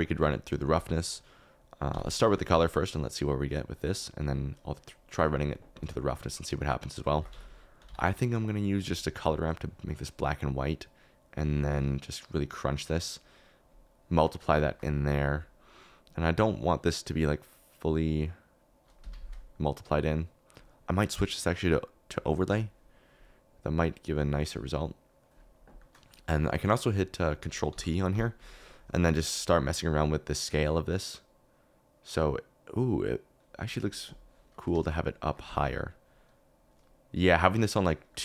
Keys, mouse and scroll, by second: 1.7 click, 3.6 click, 6.0 shift+middle click, 6.9 click, 7.1 shift+a, 14.2 middle click, 14.5 shift+middle click, 14.8-16.4 middle drag, 16.4 click, 16.5-17.6 middle drag, 18.5 middle click, 19.9 click, 21.4-22.5 drag, 24.0-25.3 drag, 25.7 click, 25.8 middle click, 26.9 click, 27.7 ctrl+t, 28.1 g, 29.6-33.4 drag, 34.9 shift+click, 36.8 middle click, 37.5 click, 37.6 middle click, 38.1 middle click.